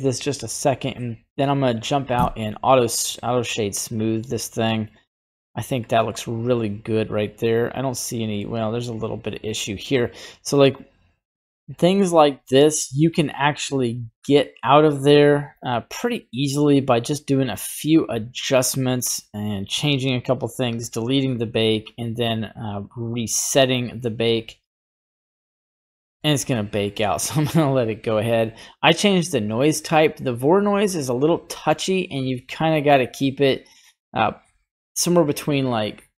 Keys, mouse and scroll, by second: 4.7-5.8 drag, 6.0 scroll down 1, 6.1-8.3 middle drag, 9.1 scroll up 2, 9.5 shift+middle click, 10.6 click, 11.5 middle click, 15.7 middle click, 17.8 click, 20.5-36.1 drag.